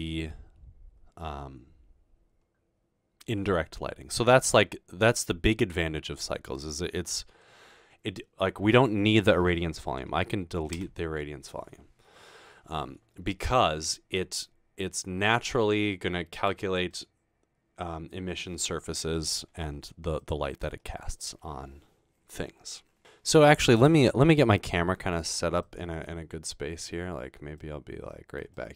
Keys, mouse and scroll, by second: 11.0 Delete, 20.2 click, 24.5-25.3 middle drag, 25.6 middle click, 26.4-27.0 scroll down 2, 27.0-27.8 scroll up 2, 27.8-28.4 middle drag, 28.5-28.7 middle drag.